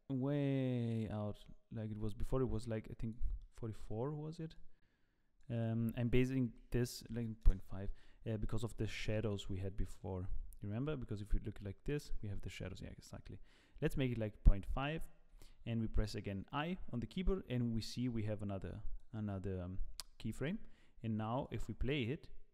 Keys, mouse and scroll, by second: 3.4 middle click, 4.5 click, 5.5 click, 8.4 middle click, 9.1 KP_0, 10.4 z, 15.4 i, 18.6 click, 20.4 z, 21.3 click, 21.9 click.